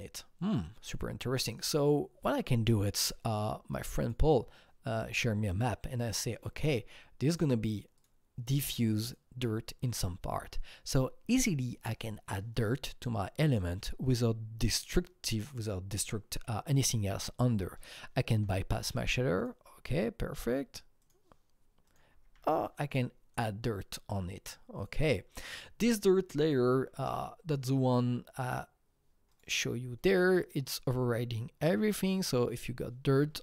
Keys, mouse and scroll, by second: 1.6-4.1 drag, 4.1 click, 5.6-9.0 drag, 9.0-11.7 drag, 13.5 click, 14.7 click, 18.3 click, 18.3 u, 19.4 click, 21.0 click, 21.8 click, 22.1 typing, 23.3 click, 24.8 click, 24.8 typing, 25.3 click, 26.5-28.4 scroll down 6, 28.4 click, 29.3 click, 29.4 scroll down 1.